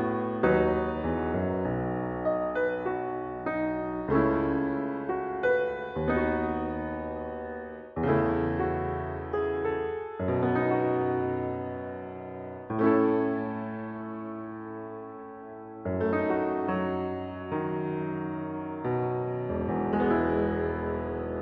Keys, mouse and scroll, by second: 1.3 2, 2.0 shift+0, 5.2 ctrl+c, 6.4 ctrl+v, 7.6 ctrl+v, 8.3 Return, 10.3 0, 13.8 space.